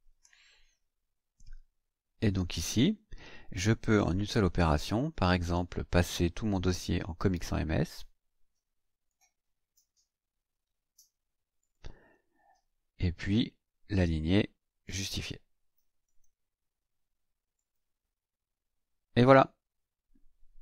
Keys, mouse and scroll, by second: 3.9 click, 6.6-9.3 drag, 9.8-10.2 scroll up 2, 10.4-10.9 scroll up 4, 11.6 click, 14.0 click, 14.8 click, 16.0 click, 17.6 click.